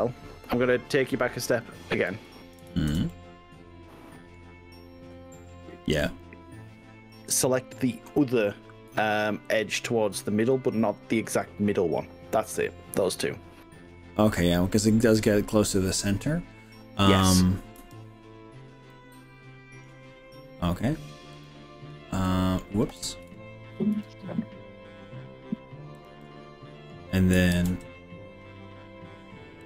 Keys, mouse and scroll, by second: 1.0 scroll up 2, 1.6 click, 2.2 ctrl+z, 2.8 ctrl+z, 3.1-4.4 middle drag, 9.0 shift+click, 13.3-17.8 middle drag, 18.9 middle click, 21.4 click, 22.3 middle drag, 23.2 ctrl+z, 24.0 e, 26.0 click, 26.2 middle click, 27.5 ctrl+r.